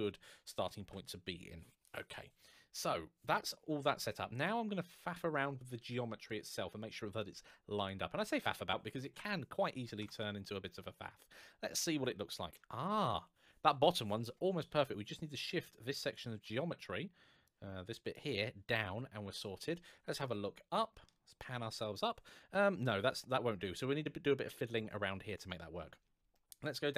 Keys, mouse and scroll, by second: 0.5 n, 0.7 t, 4.6-6.0 scroll down 1, 7.6 click, 8.9 KP_1, 9.7 Tab, 10.3-11.1 scroll up 1, 11.2 shift+middle click, 15.9 click, 20.0 shift+middle click, 26.1 shift+middle click.